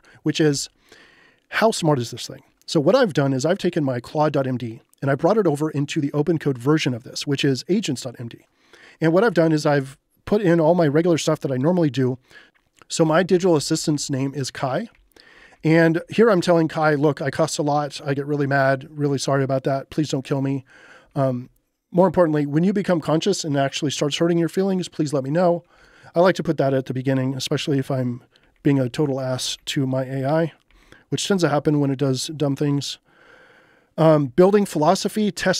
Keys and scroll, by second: 0.5 shift+h, 9.0-9.9 typing, 12.8-13.6 typing, 15.0 j, 18.5 j, 19.4 k, 21.1 j, 25.8 j, 26.8 j, 28.4 j, 29.1 j, 34.1 j, 34.4 k.